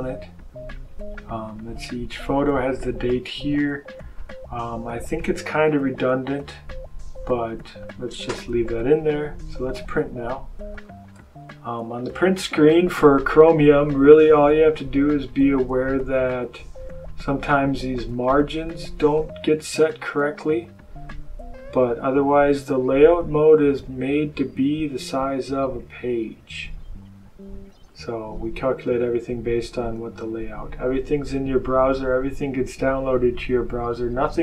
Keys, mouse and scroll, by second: 0.3 scroll up 1, 1.1-1.5 scroll down 1, 4.1 click, 7.6 click, 10.6 ctrl+p, 16.0 click, 18.0 click, 18.9 click, 21.4-22.2 scroll down 2, 22.4 scroll up 2, 23.3-25.4 scroll down 2, 25.7-26.4 scroll down 2, 26.9-27.2 scroll down 2, 27.6-27.9 scroll down 2, 28.5-29.1 scroll down 2, 29.9 scroll down 2.